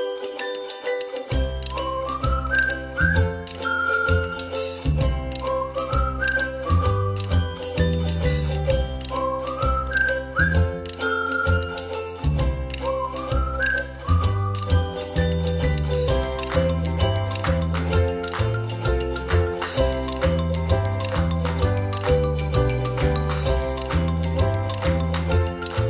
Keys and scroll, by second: 4.9 ctrl+c, 5.1 ctrl+f, 6.4 ctrl+-, 6.6 ctrl+-, 14.4 ctrl+z, 19.0 ctrl+z, 21.1 ctrl+z, 22.8 ctrl+z.